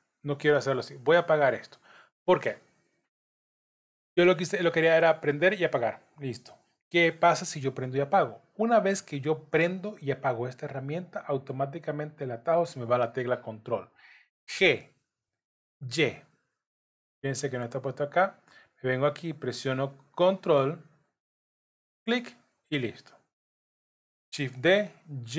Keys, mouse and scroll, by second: 1.5 click, 5.3 click, 6.3 click, 22.7 scroll down 1, 23.4 shift+middle click, 24.4 shift+d.